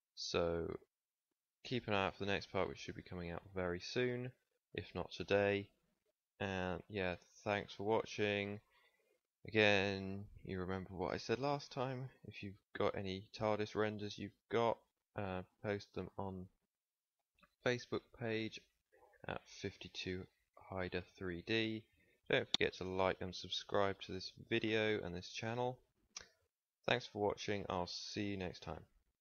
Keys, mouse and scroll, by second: 24.6 ctrl+s, 28.2-29.2 middle drag.